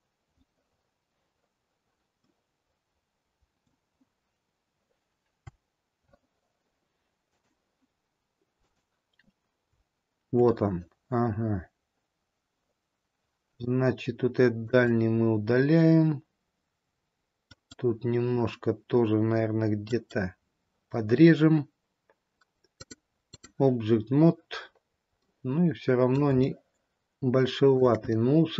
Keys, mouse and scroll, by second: 2.2 scroll up 1, 2.4 middle click, 4.2-5.0 scroll down 2, 7.2 click, 14.8 click, 17.6 click, 22.6 click, 24.7-25.4 scroll up 1, 25.4 middle click, 26.6 shift+middle click, 28.3 middle click.